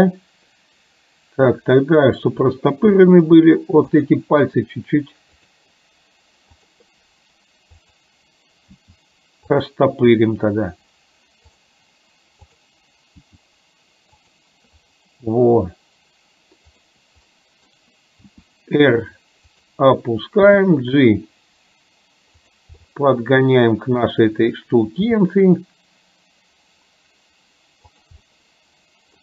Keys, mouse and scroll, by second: 2.0 click, 3.0 r, 6.6 click, 7.9 click, 8.9 r, 11.5 click, 12.5 click, 13.4 r, 17.5 middle click, 18.4 r, 20.5 g, 22.9-24.1 middle drag, 25.2 g, 28.4 middle click.